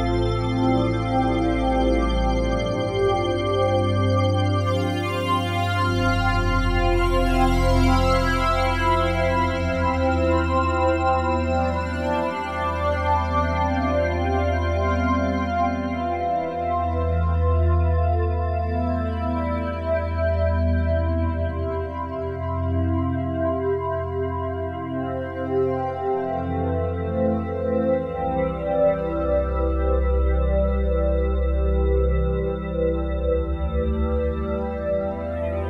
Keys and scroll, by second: 4.3 F4, 11.9 s, 13.2 z, 27.5 c.